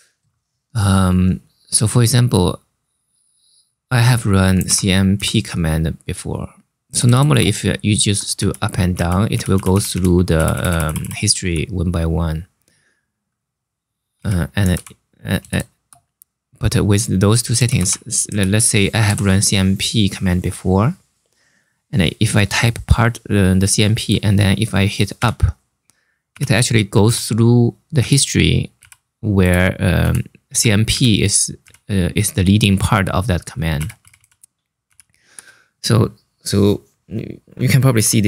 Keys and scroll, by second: 4.0-5.3 typing, 6.6 BackSpace, 6.7 BackSpace, 6.9 BackSpace, 7.0 BackSpace, 8.1 Up, 8.6 Down, 9.0 Up, 9.2 Up, 9.4 Up, 9.6 Up, 10.1 Down, 10.2 Down, 10.5 Down, 10.7 Down, 13.6-15.5 typing, 17.0-18.7 typing, 24.9 Up, 28.5 Page_Down, 29.7 Up, 30.2 Down, 30.6 Up, 31.3 Page_Up, 33.5 Down, 33.7 Down, 33.9 Down, 34.6 Up.